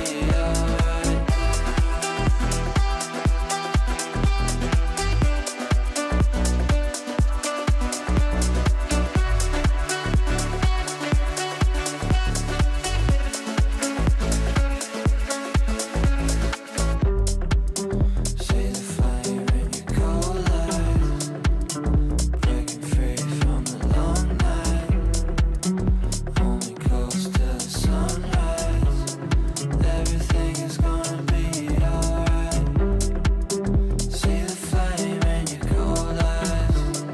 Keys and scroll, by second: 3.3 Delete, 15.8 shift+Page_Up.